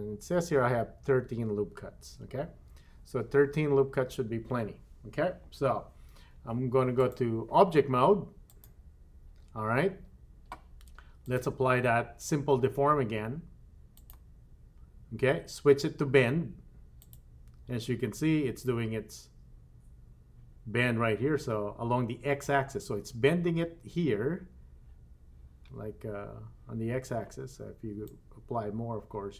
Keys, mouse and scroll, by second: 6.9-8.7 drag, 11.2-14.2 drag, 17.0 click, 28.0-29.3 drag.